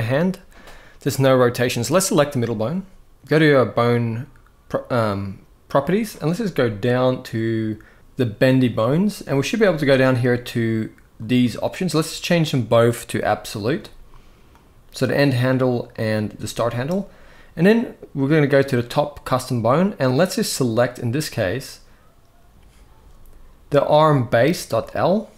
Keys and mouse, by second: 1.5 click, 11.7-13.5 drag, 14.3-15.8 drag, 19.1-24.5 drag.